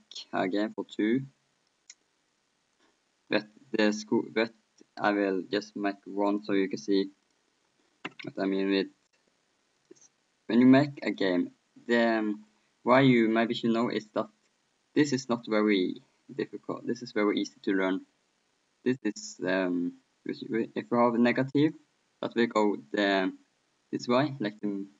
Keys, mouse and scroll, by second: 2.3-5.0 drag, 5.0-6.3 middle drag, 6.3-9.0 drag, 9.8-12.5 drag, 12.5-21.2 middle drag, 21.2-23.4 drag.